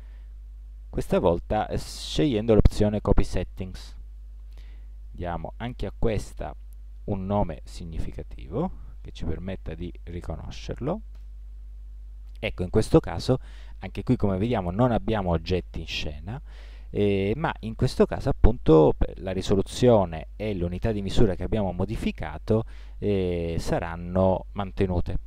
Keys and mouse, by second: 9.0 t, 11.1 t.